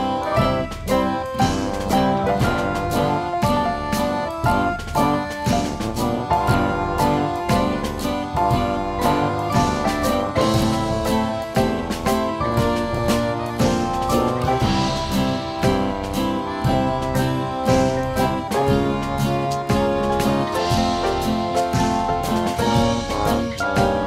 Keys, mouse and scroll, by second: 0.1 F2, 0.4 click, 1.8 click, 2.8 click, 4.5 click, 5.8 click, 6.1 click, 6.8 click, 7.5 click, 8.3 right click, 8.8 F3, 9.0 F3, 9.1 F3, 9.4 F2, 9.6 F2, 9.9-10.4 drag, 10.4 click, 10.7 F2, 11.2 click, 12.2 click, 12.9 click, 13.8 click, 14.4 click, 15.1 click, 18.6-19.3 drag, 19.5-20.1 drag, 21.8 click, 23.6 click.